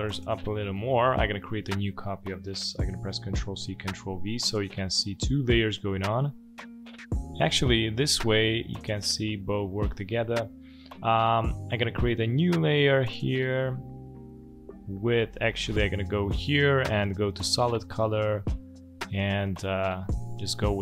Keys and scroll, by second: 3.2 ctrl+c, 3.6 ctrl+v.